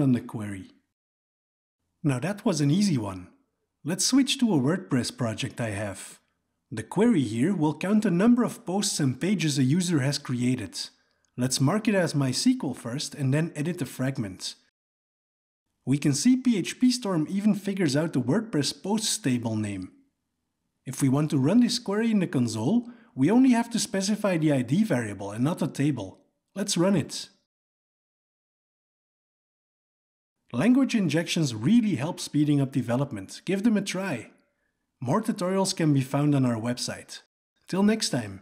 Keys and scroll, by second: 6.6 alt+Return, 8.0 alt+Return, 13.2 alt+Return, 20.2 ctrl+a, 21.1 alt+Return.